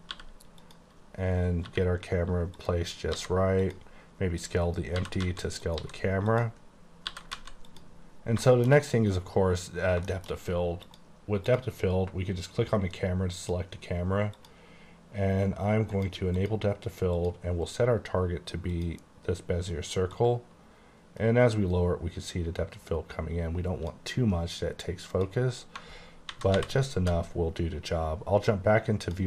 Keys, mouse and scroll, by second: 0.2 g, 0.7 click, 1.7 g, 2.7 click, 3.2 s, 3.7 click, 5.0-5.9 typing, 5.7 click, 6.4 click, 6.8 scroll up 1, 7.2 typing, 7.8 click, 8.1-8.5 scroll up 3, 8.5 shift+middle click, 9.1-10.1 scroll down 2, 10.1 middle click, 10.9 click, 11.6 click, 13.5 click, 14.4 click, 16.0 click, 16.5 click, 17.2 click, 18.8 click, 20.5 click, 25.2 click, 26.4 alt+v, 27.1 typing, 29.1 q, 29.1 click.